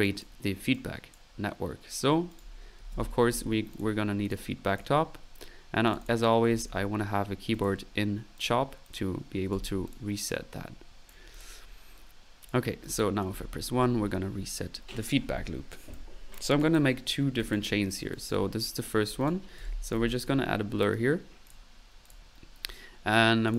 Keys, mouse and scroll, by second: 1.6 drag, 2.3 click, 2.5-3.0 right drag, 2.7-3.4 typing, 3.8 click, 4.3 click, 4.7 click, 6.2-7.0 typing, 7.6-8.8 drag, 9.5 a, 10.9 click, 12.4 click, 13.4 typing, 14.0 middle click, 15.0 typing, 15.9-17.1 drag, 17.1 middle click, 17.5-17.9 drag, 17.9 middle click, 18.1 click, 18.3 drag, 18.5-20.1 typing, 19.2 right click, 19.3 click, 22.6 middle click.